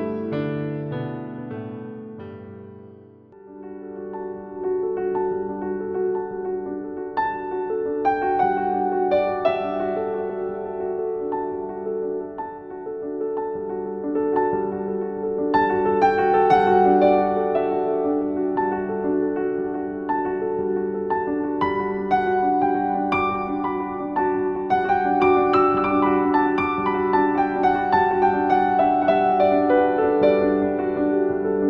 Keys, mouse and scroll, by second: 0.8 ctrl+v, 3.8 click, 5.5 Return, 6.7 click, 7.2 z, 7.4 click, 7.8 space, 8.0 z, 8.1 click, 9.4-10.8 typing, 12.6 click, 13.2 click, 16.4 click, 19.1 click, 23.4 Return, 25.5-31.6 drag.